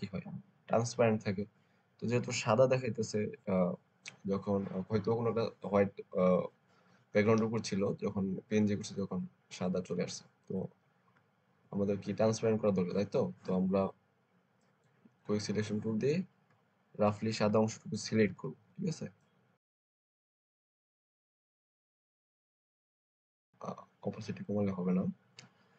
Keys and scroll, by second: 18.1 [, 18.3 [.